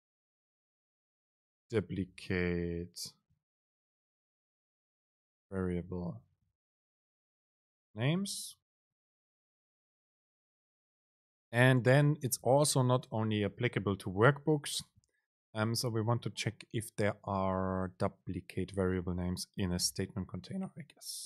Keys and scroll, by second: 6.2 BackSpace, 10.4 Down, 11.0 Up, 12.5 super+Left, 14.9 super+space.